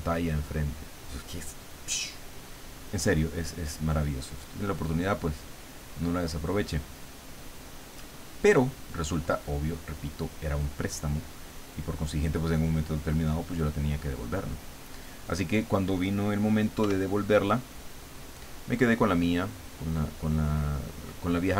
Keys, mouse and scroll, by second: 3.4-6.7 drag, 7.4-9.8 drag, 11.1 click, 12.5 click, 13.1-15.0 drag, 16.8 f, 17.9 click, 19.0 click, 19.3-20.9 drag, 21.1-21.5 drag.